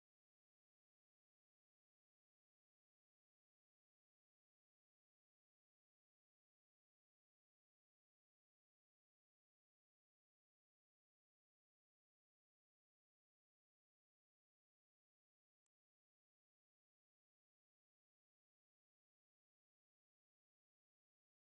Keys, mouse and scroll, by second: 0.0-0.7 scroll down 5, 0.2 a, 0.7 click, 0.9 scroll up 1, 1.0 click, 1.8 scroll down 1, 1.9 middle click, 2.0-2.4 scroll up 7, 2.4-2.7 shift+middle drag, 2.7 ctrl+b, 2.9 z, 3.4 click, 3.8 z, 4.0 click, 4.0 scroll down 6, 4.2-4.8 shift+middle drag, 4.8 scroll up 2, 4.9 click, 5.4 0, 5.6 click, 6.5 click, 6.6 shift+a, 7.4 click, 8.4 scroll up 1, 8.5 shift+middle click, 8.6 scroll down 3, 8.8 ctrl+b, 9.3 z, 9.7 scroll up 1, 9.9-10.9 drag, 10.9 z, 11.4 scroll down 1, 11.6 shift+middle click, 11.8-12.3 drag, 12.6 scroll up 3, 12.7 shift+middle click, 13.1 click, 13.5 z, 13.9 ctrl+b, 14.6-16.1 drag, 17.4 z, 17.7-18.2 scroll down 6, 18.0 ctrl+alt+b, 18.2 shift+middle click, 18.6 scroll up 1, 18.7-19.0 shift+middle drag, 19.0 click, 19.4 Tab, 19.7 Tab, 19.9-20.5 scroll up 1, 20.5-21.5 drag.